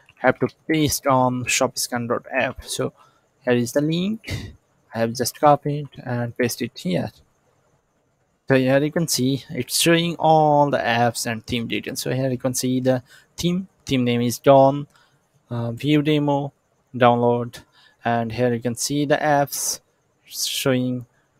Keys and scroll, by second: 0.0-0.1 typing, 0.6 Return, 2.7 ctrl+c, 5.6 ctrl+v.